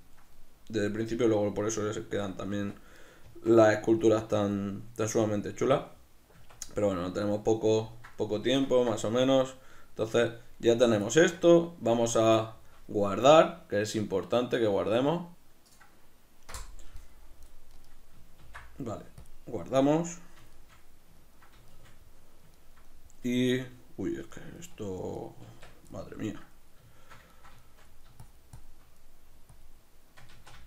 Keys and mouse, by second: 0.0 ctrl+middle click, 0.9 click, 1.6-3.0 middle drag, 2.5 b, 2.7 Tab, 3.0 right click, 3.2 Tab, 4.0 click, 4.8 middle click, 5.2 click, 5.8 middle click, 6.4 b, 6.5 Tab, 15.7-17.4 drag, 17.4 middle click, 18.5 ctrl+s, 20.1 middle click, 24.4-25.5 ctrl+middle drag, 25.5 Tab, 26.0-28.3 middle drag, 28.3 shift+click, 29.1 middle click, 29.6 click, 30.4 ctrl+z.